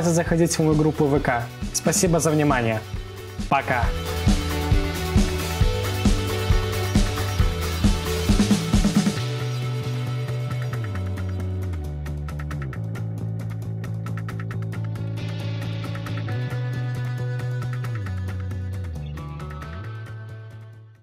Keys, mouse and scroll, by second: 0.1-3.6 scroll up 2, 3.6-21.0 scroll up 1.